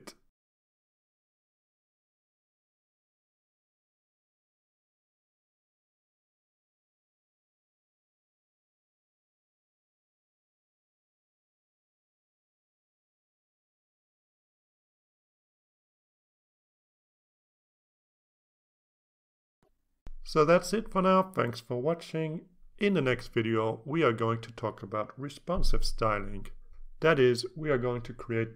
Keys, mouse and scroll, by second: 0.2 click, 0.7 click, 1.3 click, 2.2 click, 3.2 click, 6.7 click, 7.4 click, 8.7-9.1 scroll down 2, 10.2 scroll down 2, 11.0 click, 13.5-13.8 scroll up 2, 14.2-16.0 drag, 19.6-28.5 drag.